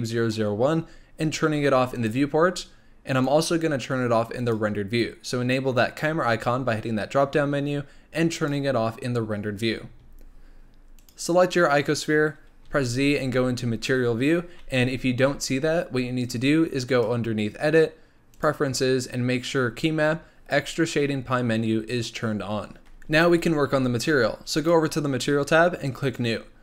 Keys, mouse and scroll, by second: 1.9 click, 3.1-6.2 drag, 8.3 click, 11.0 click, 12.6 z, 16.9-24.7 drag, 26.0 click.